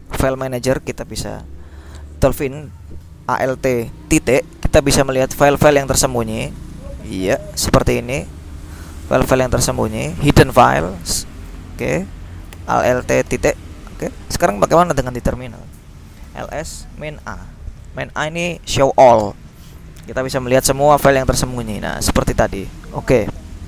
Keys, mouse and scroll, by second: 0.2-1.1 scroll up 2, 4.3 ., 5.7-9.6 scroll down 3, 9.6-10.9 scroll up 1, 10.9-11.5 scroll up 1, 11.5-11.9 scroll up 1, 13.4 ., 14.8 click, 16.1-17.8 typing, 19.2 Return, 21.0-22.1 scroll up 2, 22.4-23.6 scroll down 3.